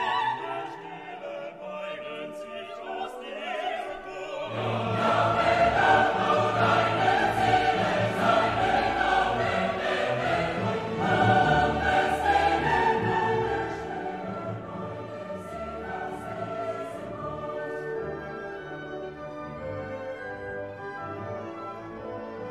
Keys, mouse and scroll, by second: 0.3 click, 2.3 F2, 3.6 c, 4.6-6.0 typing, 8.2 click, 9.1 click, 9.4-12.2 drag, 12.9 click, 13.6 space, 14.1 click, 14.5 space, 14.9 click, 15.5-15.9 scroll down 2, 16.1 scroll up 2, 19.5 click, 20.6 click, 21.7 click, 22.4 2.